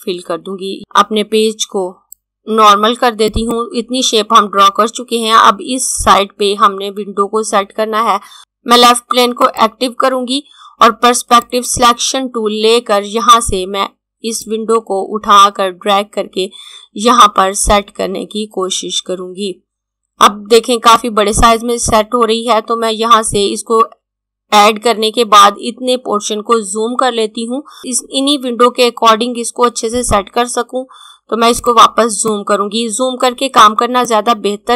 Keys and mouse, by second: 2.0 click, 9.4 click, 14.3 click, 31.5 click.